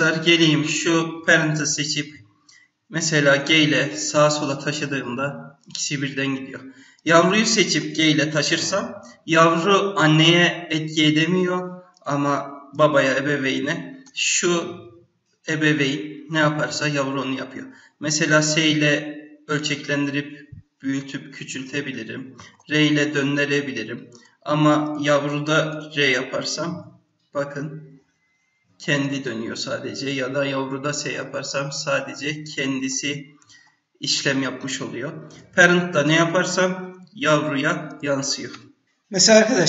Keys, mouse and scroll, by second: 0.3 click, 3.3 g, 7.0 click, 7.8 g, 12.7 click, 14.0 g, 22.5 r, 24.9 click, 25.7 r, 30.0 click, 30.6 s, 32.7 scroll up 1, 33.1 scroll down 2, 33.6-35.3 scroll up 1, 35.3 click, 36.1 s, 39.5 click.